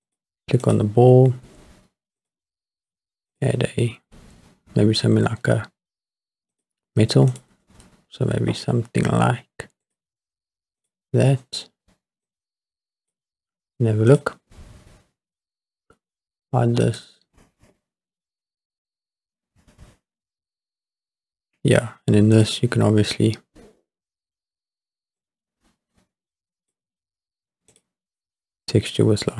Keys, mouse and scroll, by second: 0.6 click, 2.2 click, 3.3-6.7 drag, 7.3-9.9 drag, 10.8 click, 12.3 click, 14.4 click, 16.8 click, 18.0 scroll up 2, 20.7 scroll down 2, 22.3 click, 25.2-26.8 drag, 27.7-29.3 drag.